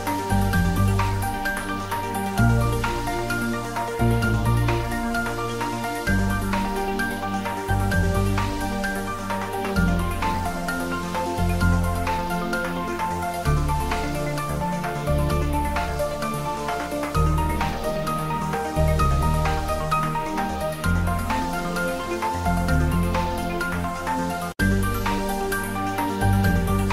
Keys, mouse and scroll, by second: 0.0 Tab, 0.2 middle click, 1.1 ctrl+s, 1.3 ctrl+middle click, 1.7 shift+z, 2.1 ctrl+s, 2.3-5.2 middle drag, 5.2 ctrl+s, 5.3 click, 5.6 middle click, 6.8 click, 7.9 ctrl+3, 8.7 Tab, 9.4 ctrl+e, 10.2 click, 10.9 ctrl+z, 12.6 Tab, 13.5 ctrl+3, 14.9 ctrl+r, 15.6 click, 17.4 click, 17.6 shift+middle click, 18.0-19.4 ctrl+middle drag, 19.4 ctrl+r, 19.9 click, 21.2 ctrl+r, 22.0 click, 24.4-26.8 middle drag, 26.8 ctrl+r.